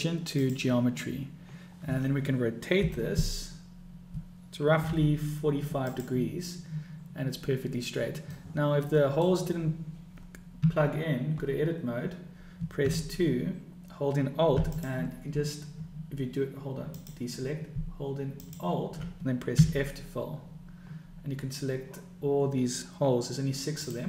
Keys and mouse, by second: 2.8 r, 8.4-9.3 middle drag, 10.6 Tab, 12.8 2, 14.6 alt+click, 18.4 alt+click, 19.9 f, 23.7 click.